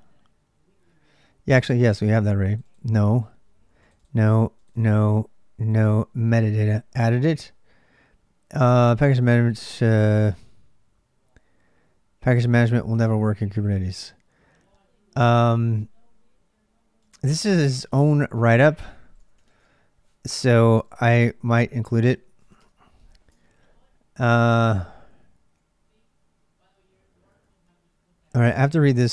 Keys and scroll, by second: 0.0-29.1 typing, 22.4 Return, 23.1 ctrl+[.